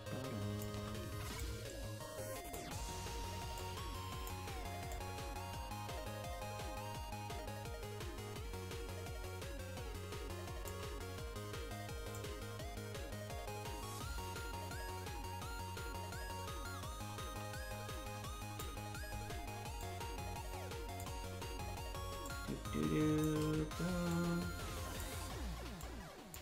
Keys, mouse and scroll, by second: 1.3-2.5 drag, 3.5 click, 4.9-10.7 drag, 12.1-18.6 drag, 19.7-21.0 drag, 22.2-23.2 shift+drag, 24.0 click, 25.7 click.